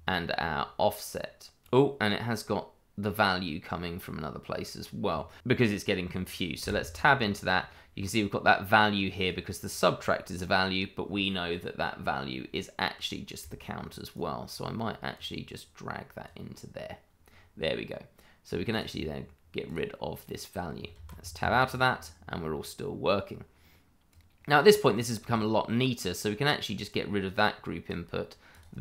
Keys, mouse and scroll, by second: 1.6 ctrl+z, 2.3 click, 6.6 Tab, 7.2-8.7 scroll down 1, 9.2 click, 14.1 right click, 15.1 click, 17.3-18.2 scroll up 1, 18.7 click, 20.9 Tab, 21.5-23.2 scroll down 1, 23.2-24.1 scroll up 1, 24.1 click, 24.9-26.9 scroll up 1, 26.9 click.